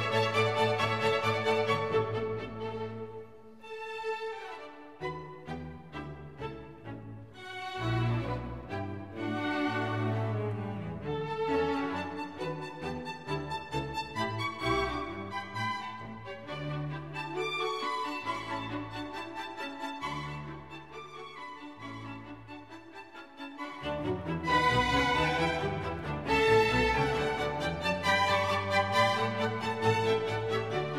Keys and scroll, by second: 0.7 super+d, 3.5 super+d, 4.1 super+d, 9.3 super+d, 24.6-26.5 typing, 26.6 Return.